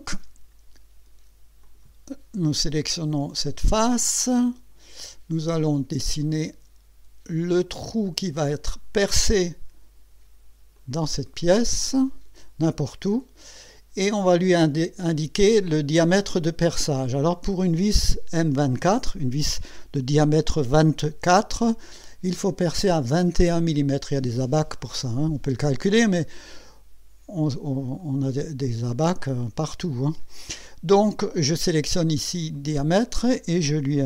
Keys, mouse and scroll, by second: 1.6 click, 4.4 click, 5.3-5.7 scroll up 1, 8.3 click, 10.7 click, 12.1 click, 13.1 right click, 28.0 click, 31.8 click, 32.5 click.